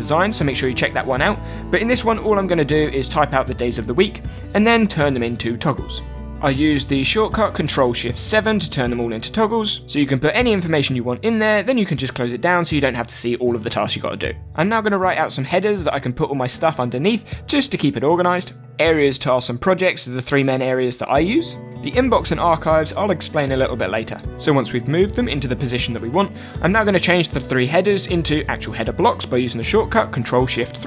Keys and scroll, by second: 0.0-3.3 typing, 5.1-5.9 typing, 8.5-12.1 typing, 14.2-23.0 typing, 18.9 Return, 20.7 Return, 30.2 ctrl+shift+3.